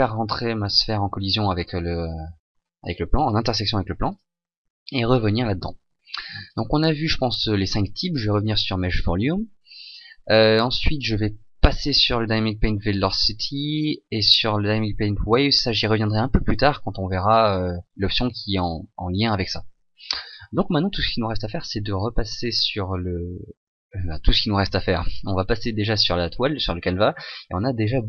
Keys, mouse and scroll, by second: 0.1 click, 4.1 click.